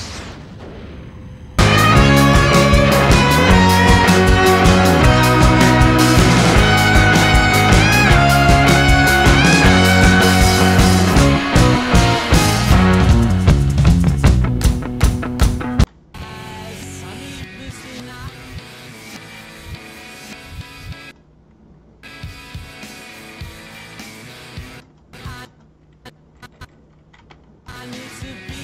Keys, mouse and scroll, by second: 3.2 =, 3.4 =, 13.2 space, 13.4 o, 14.6 Left, 16.1 j, 21.0 space, 22.0 space, 24.8 space, 25.1 space, 25.4 space, 26.0 Left, 26.4 Left, 26.6 Left, 27.3 i, 27.6 space.